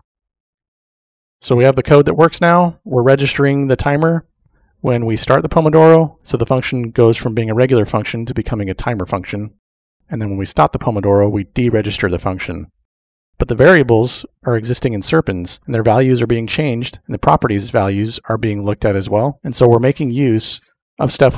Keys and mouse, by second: 0.1 click, 14.9 middle click, 15.5 middle click, 19.6 middle click.